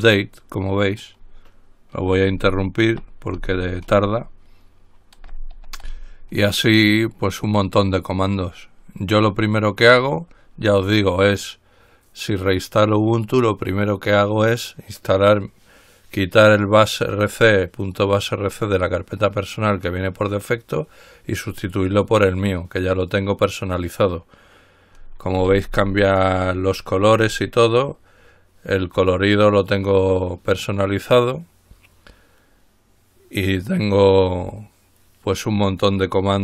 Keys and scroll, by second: 3.3 ctrl+z, 5.9 ctrl+l, 25.5-26.2 typing, 27.4 Return, 28.1 typing.